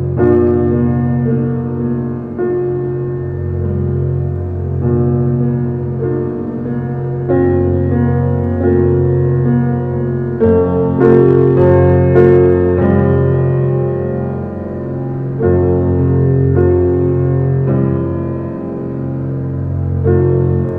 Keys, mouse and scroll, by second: 2.8 middle click, 3.2 Tab, 4.1 g, 9.1 Tab, 9.8 g, 12.1 `, 13.3 Tab, 13.6 scroll down 2, 14.0 middle drag, 14.5 click, 14.7 scroll down 3, 15.0-16.9 middle drag, 18.0 shift+a.